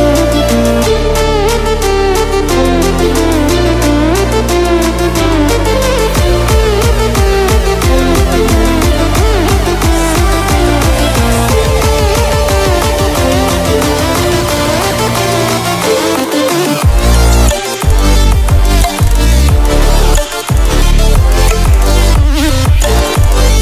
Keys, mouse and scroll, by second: 2.4 typing.